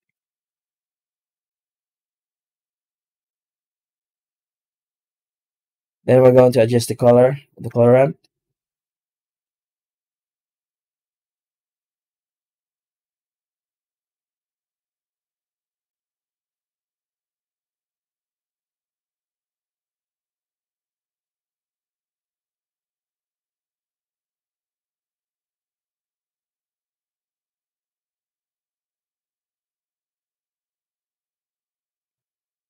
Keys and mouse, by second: 0.4 z, 3.6 middle click, 4.9 z, 7.5 z, 9.2 click, 14.1-16.8 drag, 17.4-18.7 drag, 19.3-20.7 drag, 29.8 z, 31.2 right click, 32.1 alt+shift+z.